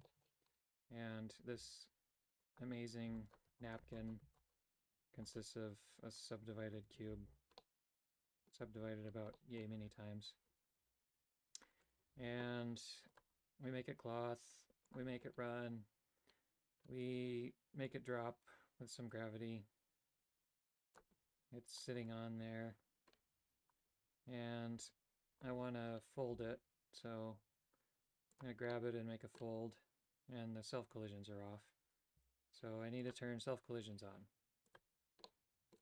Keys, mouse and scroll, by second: 0.1 shift+middle click, 0.4 Tab, 1.5 w, 3.0-5.1 typing, 7.1 ctrl+z, 7.5 middle click, 8.7 Tab, 9.3 middle click, 10.9 right click, 14.9 click, 17.8-21.1 drag, 23.9 right click, 24.8 Tab, 25.4 right click, 26.5 g, 28.8 middle click, 32.3 g, 34.7 click, 35.4 middle click.